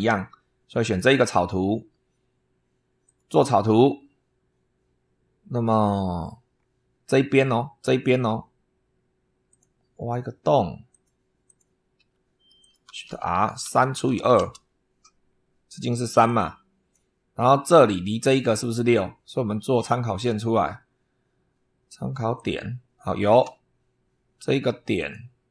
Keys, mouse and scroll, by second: 0.7 click, 2.9 click, 6.0-6.3 scroll up 2, 6.4 scroll down 2, 9.3 click, 10.8 click, 11.3 click, 11.8 Escape, 12.5 click, 12.9-14.5 typing, 15.3 scroll up 2, 16.1 click, 20.0 click, 22.2 click, 23.3 Escape, 24.8 click.